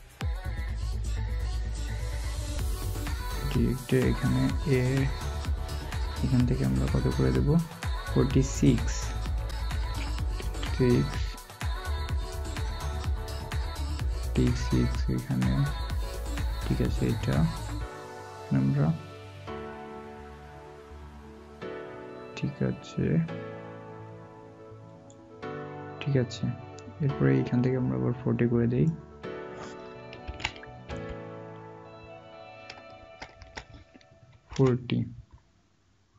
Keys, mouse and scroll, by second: 9.8-10.4 typing, 30.2-30.8 typing, 32.9-34.9 typing.